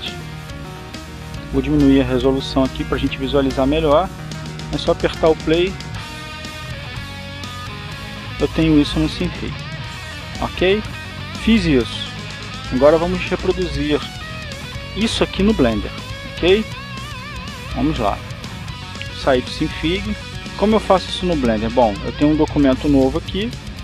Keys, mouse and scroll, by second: 2.7 click, 3.5 click, 5.9 click, 11.2 click, 13.6 click, 15.2 click, 21.2 click.